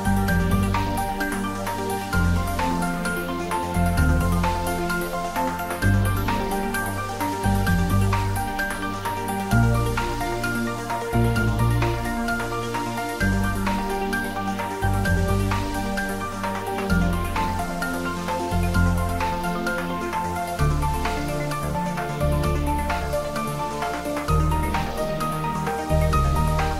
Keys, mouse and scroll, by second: 1.1 Tab, 3.3 ctrl+middle click, 4.7-6.7 shift+middle drag, 10.4-12.2 ctrl+middle drag, 12.2 shift+;, 13.0 ctrl+middle click, 13.8 middle click, 14.4-16.7 shift+middle drag, 17.3 Tab, 18.3 click, 19.3-20.9 middle drag, 20.9-25.9 drag, 25.9 click.